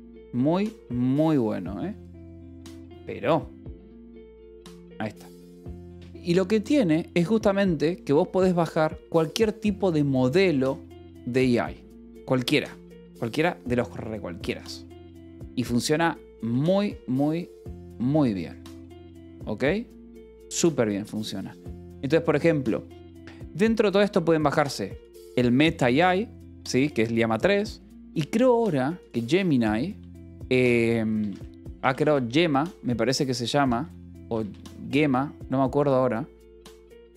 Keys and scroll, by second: 12.5 ctrl+-, 12.6 ctrl+=, 13.5 =, 15.9 ctrl+l, 17.1 ctrl+=, 30.2-32.4 typing, 33.6 BackSpace, 34.2 a, 34.3 Return.